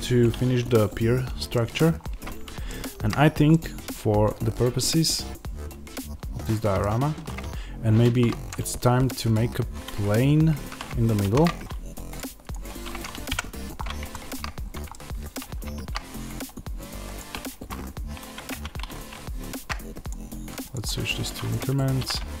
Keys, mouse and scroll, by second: 1.8-2.5 scroll up 2, 3.0-3.4 scroll down 2, 10.4 ctrl+z, 11.1 shift+c, 12.0 click, 12.4 click, 13.2 KP_Decimal, 13.7-14.0 scroll down 1, 14.0 shift+middle click, 14.5 scroll up 1, 14.8 shift+middle click, 18.4 Tab, 18.4-20.9 middle drag, 20.9 click, 20.9-21.4 scroll down 1, 21.8 scroll down 1, 21.9 s.